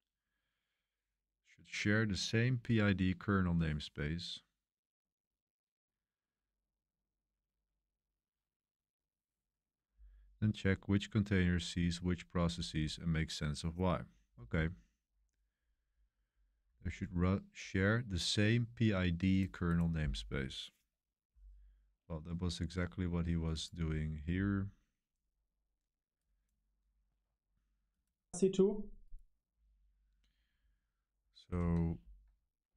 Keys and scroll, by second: 31.5 super+3, 32.6 super+1.